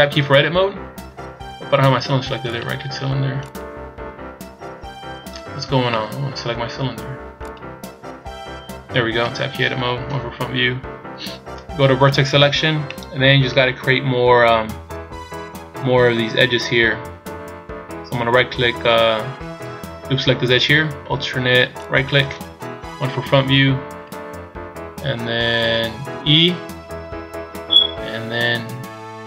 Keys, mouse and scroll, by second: 0.0 Tab, 0.7-1.3 scroll up 1, 1.3 scroll down 3, 1.8 Tab, 3.0 right click, 4.2 right click, 4.2 Tab, 5.1 Tab, 5.6 scroll down 1, 5.8 middle click, 8.1 right click, 9.4 Tab, 10.1 KP_1, 10.8-11.7 scroll up 4, 12.2 click, 12.9 middle click, 13.9 scroll up 1, 14.4 scroll up 1, 19.7 a, 21.8 alt+right click, 22.8 KP_1, 26.3 e.